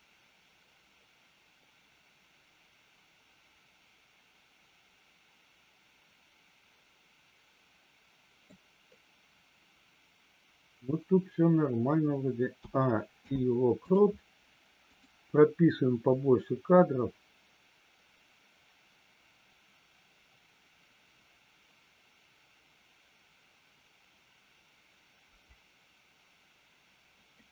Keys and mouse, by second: 13.2 i, 14.9 click, 16.4-27.5 drag.